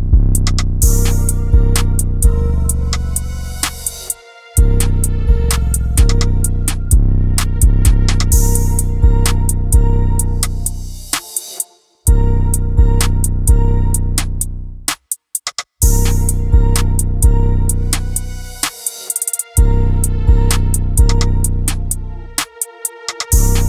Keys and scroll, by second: 21.0 Down, 21.1 Down, 22.5 Down, 22.8 Down.